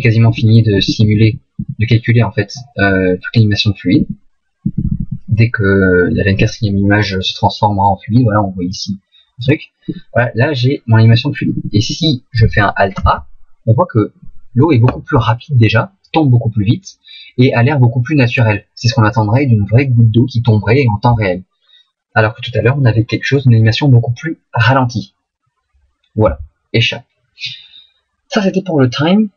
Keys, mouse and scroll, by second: 0.2 Left, 0.8 Left, 1.0 Right, 1.2 Right, 1.6 Right, 4.0 Right, 4.6 Right, 4.8 Right, 5.0 Right, 9.8-11.1 Left, 11.2 Left, 11.4 Left, 11.6 Left, 11.8 Left, 13.0 alt+a, 26.2 Escape.